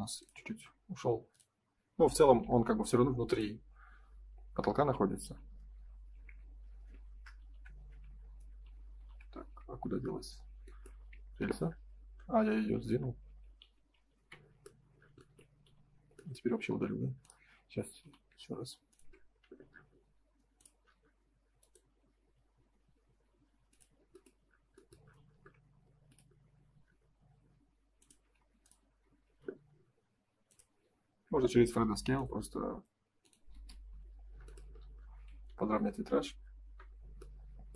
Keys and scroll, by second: 2.4 Escape, 5.2 F4, 7.3 ctrl+y, 8.6 ctrl+y, 9.8 Escape, 11.0 Escape, 13.2 ctrl+z, 15.6 F3, 18.0 m, 20.7 space, 25.0 m, 28.3 space, 29.2 ctrl+s, 31.3 F3, 33.5 space, 33.7 F4, 35.3 ctrl+s.